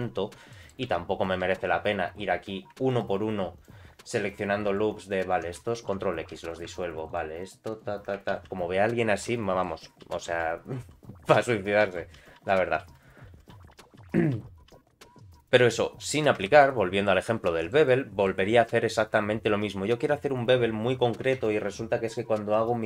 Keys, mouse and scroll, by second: 0.1-0.5 scroll up 3, 0.5 middle click, 0.8 2, 1.2 click, 1.5 alt+click, 2.9 alt+shift+click, 3.5 alt+shift+click, 4.3 alt+shift+click, 5.1 alt+shift+click, 5.8 ctrl+x, 6.5 alt+click, 7.1 alt+shift+click, 7.4 alt+shift+click, 7.7 alt+shift+click, 8.4 ctrl+x, 8.9-9.4 scroll down 2, 9.3 middle click, 10.1 ctrl+z, 10.3 ctrl+z, 12.4 ctrl+z, 13.5-15.2 ctrl+z, 15.7 middle click, 16.4 Tab, 16.6 middle click, 17.4 shift+middle click, 17.8 middle click, 18.6 middle click, 20.8 scroll up 1, 21.2 Tab.